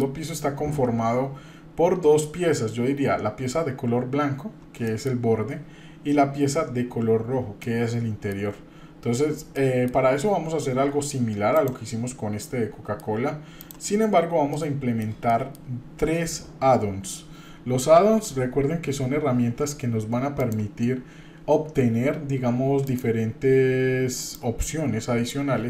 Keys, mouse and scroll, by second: 4.8 shift+middle click, 7.6 shift+middle click, 8.5 shift+scroll down 1, 9.6 shift+middle click, 14.5 middle click, 15.3 shift+middle click.